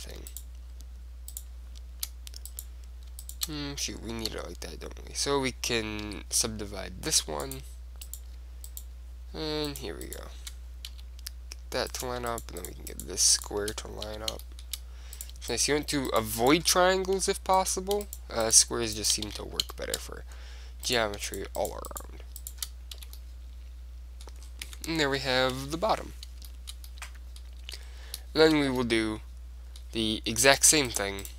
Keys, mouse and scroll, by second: 4.4 w, 6.2 w, 8.2-11.9 right drag, 11.0 f, 12.1-15.2 right drag, 14.2 f, 14.6 click, 15.3 middle click, 16.5-19.9 right drag, 17.3 f, 19.4 f, 19.9-21.0 middle drag, 21.0 click, 21.7 middle click, 22.6 right click, 23.1 f, 23.3 click, 24.1 middle click, 24.3 right click, 24.8 Tab, 25.3-26.4 middle drag, 25.7 KP_1, 27.8 Tab, 30.6-31.3 right drag.